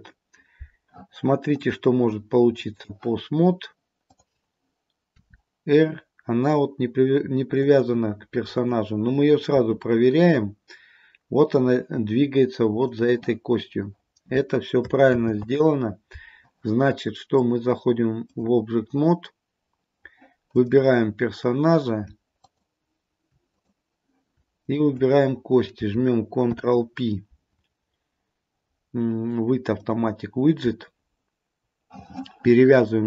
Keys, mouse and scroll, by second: 1.7 click, 4.1 click, 5.2 r, 8.7 click, 9.7 r, 15.2 ctrl+z, 17.4 click, 20.7 click, 22.5 shift+click, 23.6 click, 24.7 shift+click, 26.5 ctrl+p.